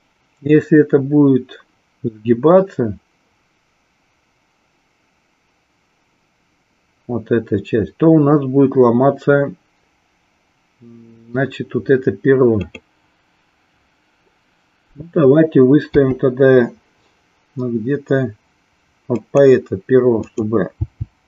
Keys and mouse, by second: 12.5 click, 19.3 click, 20.2 click.